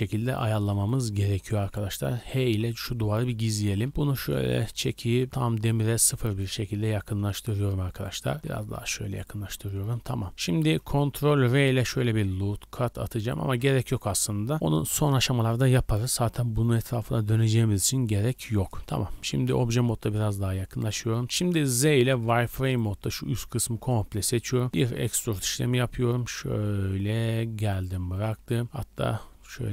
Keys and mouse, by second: 2.4 h, 3.4-4.2 middle drag, 6.3 middle click, 6.3 KP_1, 8.0-9.3 drag, 8.4 g, 9.3 middle click, 9.3 Tab, 9.5-10.6 drag, 11.4 ctrl+r, 13.5 ctrl+z, 18.6 Tab, 19.0 g, 20.9 Tab, 21.2-22.2 typing, 24.7 e, 25.4 g, 28.6 r.